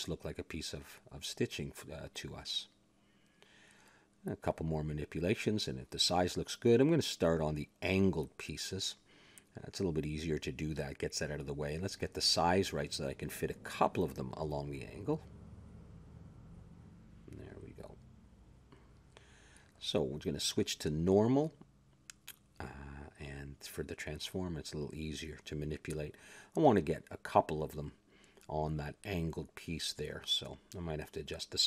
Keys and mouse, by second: 0.3 click, 1.3 shift+s, 1.9 click, 2.5 ctrl+a, 3.9 Tab, 4.7 s, 5.5 a, 6.5 Tab, 7.3 click, 8.6 KP_Decimal, 9.7 ctrl+KP_3, 10.5 Tab, 11.5 a, 12.0 s, 13.3 s, 14.3-16.3 middle drag, 15.5 Tab, 16.3 r, 17.8 click, 18.7 r, 20.6 click, 22.0-23.4 drag, 25.8-26.8 middle drag, 29.2-31.4 drag, 31.5 ctrl+KP_3.